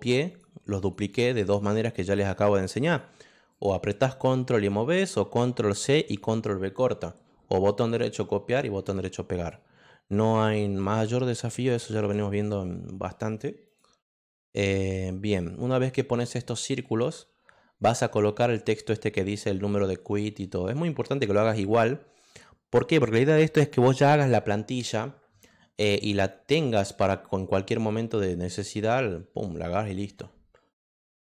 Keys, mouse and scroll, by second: 0.3 click, 0.8 click, 1.4 click, 2.1 click, 2.8 click, 3.5 click, 9.3 click, 13.6 click, 31.1 click.